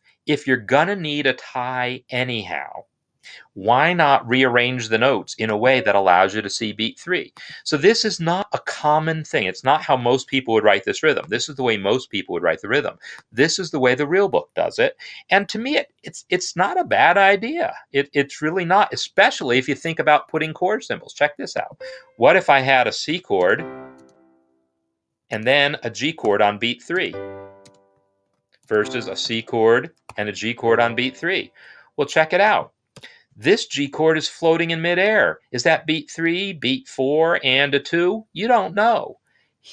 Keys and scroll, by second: 22.3 ctrl+k, 23.0 shift+c, 23.3 space, 24.0 space, 25.2-29.1 typing, 32.9 BackSpace.